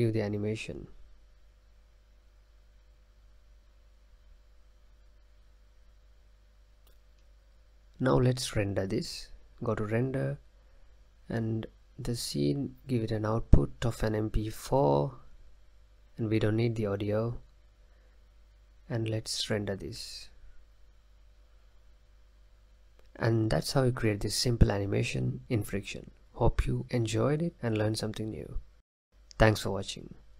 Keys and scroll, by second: 1.8 space, 3.5 space.